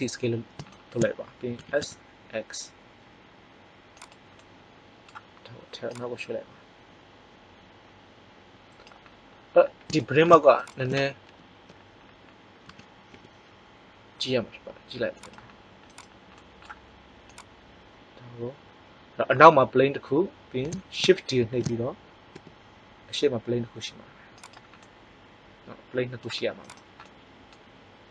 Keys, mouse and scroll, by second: 1.5 s, 4.3 click, 6.1-7.6 drag, 10.5-12.0 right drag, 11.2 ctrl+l, 12.6 s, 15.8 click, 16.4-17.6 middle drag, 17.6 click, 21.4 shift+d, 26.5-28.1 right drag.